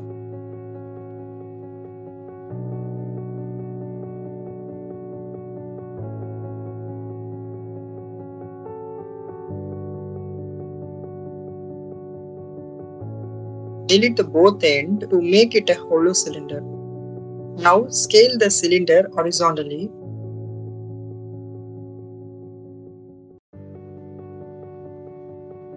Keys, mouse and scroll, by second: 0.9 click, 1.5-3.1 drag, 4.3 click, 5.8 shift+middle click, 7.6 a, 8.4 s, 9.2 click, 9.6 3, 11.2 click, 12.9 shift+click, 13.7 Delete, 15.9 a, 16.7 s, 17.6 x, 19.2 click, 20.6 shift+middle click, 21.1-22.6 middle drag, 22.6 click, 24.0 click.